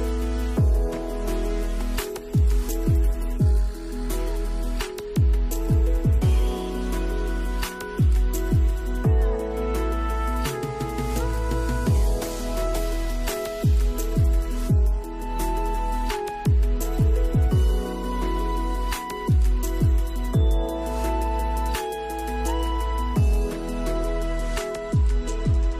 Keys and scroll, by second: 10.8 space, 13.5 space, 19.3 space, 25.4 space.